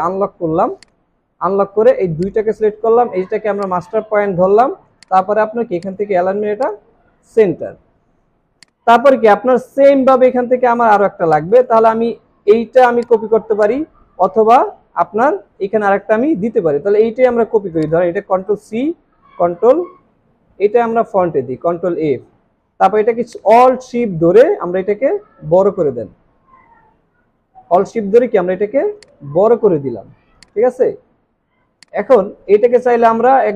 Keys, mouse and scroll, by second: 2.2 shift+click, 8.5 space, 11.2 space, 18.7 ctrl+c, 18.9 typing, 21.2 ctrl+f, 30.0 alt+scroll down 1, 30.3 space, 30.8 space, 31.1 alt+scroll up 1, 31.6 alt+scroll down 1, 32.7 alt+scroll up 1.